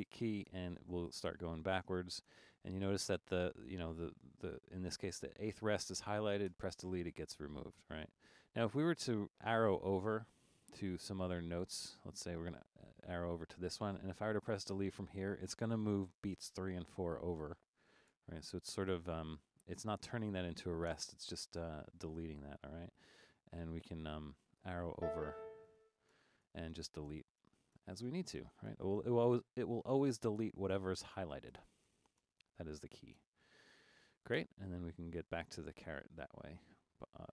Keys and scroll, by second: 0.0-2.3 typing, 6.6 BackSpace, 7.8 BackSpace, 9.1 Left, 9.7 Left, 10.3 Left, 10.9 Left, 11.5 Left, 12.2 Left, 18.2 BackSpace, 21.0 BackSpace, 21.7 BackSpace, 22.4 Right, 22.6 Right, 22.9 Right, 23.1 Right, 23.8 Right, 24.4 Left, 25.0-33.2 typing, 34.4 BackSpace.